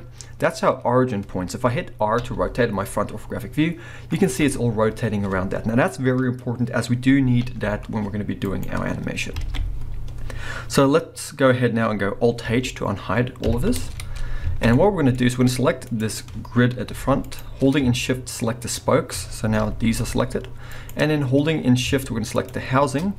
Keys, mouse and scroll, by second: 1.0 scroll down 1, 1.8 scroll down 1, 2.2 r, 4.4 right click, 4.5 scroll up 1, 7.5 r, 8.6 right click, 9.4 alt+a, 13.4 alt+h, 14.4 scroll down 2, 14.6 a, 14.7-15.8 middle drag, 15.2-15.8 scroll up 2, 15.8 click, 16.2-16.8 scroll down 1, 16.8 g, 17.4 right click, 18.6 shift+click, 19.6 g, 20.9 right click, 22.3 shift+click.